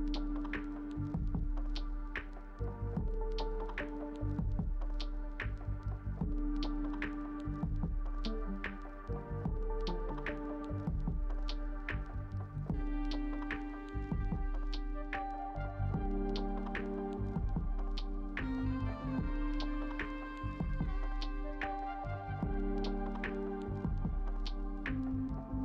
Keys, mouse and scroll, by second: 2.4 double click, 21.5 ctrl+c.